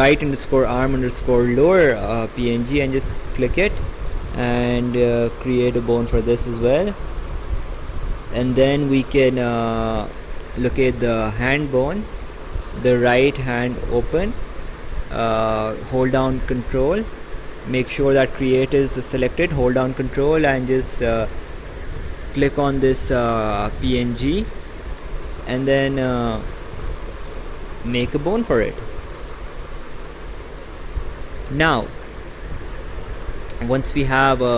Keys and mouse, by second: 3.2 ctrl+click, 5.2 click, 22.3 ctrl+click, 25.8 click.